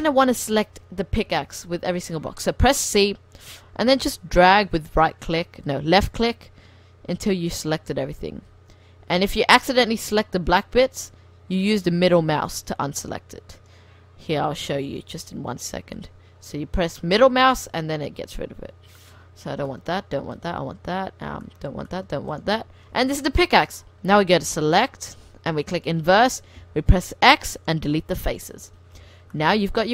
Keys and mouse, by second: 1.3 c, 22.4-24.2 drag, 24.2 middle click, 25.9 click, 26.3 click, 26.6 x, 28.2 click, 29.1 Tab, 29.8 r.